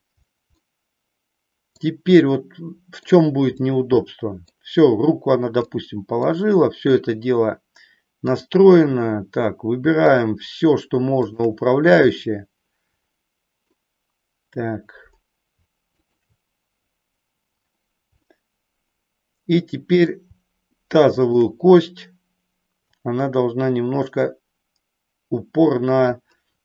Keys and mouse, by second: 0.6-1.9 middle drag, 2.2-3.2 middle drag, 3.6 middle click, 5.7 middle click, 8.2-9.5 drag, 11.5-12.8 shift+drag, 12.8 middle click, 15.9-16.9 shift+drag, 18.2-20.1 middle drag, 21.3 shift+click, 22.8-26.1 drag.